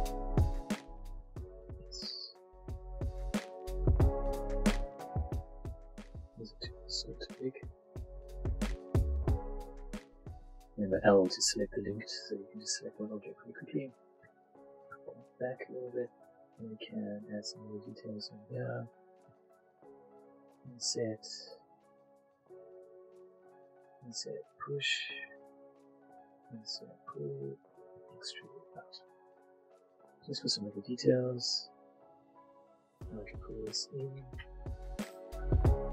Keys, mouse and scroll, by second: 0.0 alt+shift+click, 0.4 alt+shift+s, 0.6 x, 1.5 click, 1.8 middle click, 2.4 alt+click, 2.8 middle click, 3.4 alt+shift+click, 3.8 alt+click, 3.9 middle click, 4.9 alt+shift+Tab, 5.1 click, 5.4 middle click, 5.7 Tab, 5.9 middle click, 7.0 scroll, 7.1 s, 7.5-8.2 scroll up 1, 8.2 scroll, 8.3 ctrl+click, 9.2 alt+click, 9.7 ctrl+alt+a, 10.6 l, 11.1 s, 12.3 ctrl+click, 12.7 Tab, 12.8 middle click, 14.0 click, 16.0 Tab, 16.4 click, 16.6 middle click, 17.6 click, 19.2 click, 19.9-23.9 shift+drag, 20.5 shift+i, 23.2 i, 26.2 i, 26.9 click, 28.0 e, 28.7 click, 28.9 Tab, 29.3 middle click, 30.6 shift+middle click, 30.9 middle click, 30.9 middle click, 31.3 shift+Tab, 32.1 a, 32.7 l, 33.4 click, 34.1 middle click, 34.2 Tab, 34.5 shift+middle click, 34.8 click, 35.3 click, 35.7 Tab.